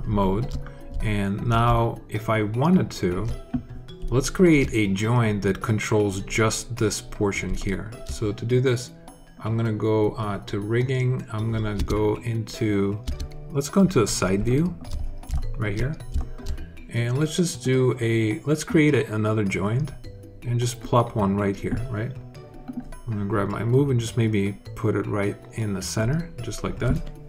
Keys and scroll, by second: 11.6 space, 12.9 space.